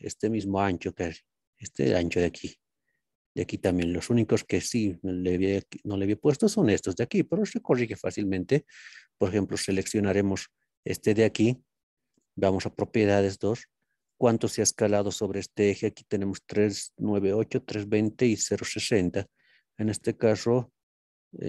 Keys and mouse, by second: 0.7-1.2 middle drag, 2.6 middle click, 4.0-4.9 middle drag, 6.3 click, 7.4-8.2 drag, 8.5 click, 12.6 n.